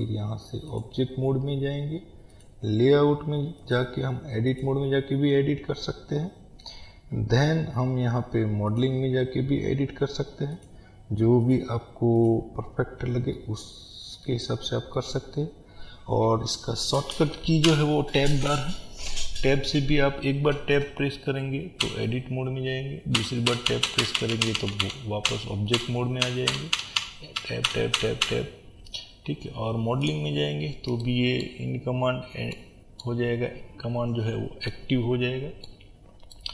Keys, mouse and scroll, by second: 13.4-30.1 middle drag, 14.5-14.9 scroll down 2, 17.7 Tab, 30.1 click, 31.0-36.5 middle drag, 31.7-32.5 scroll up 1, 33.9-34.7 scroll down 1.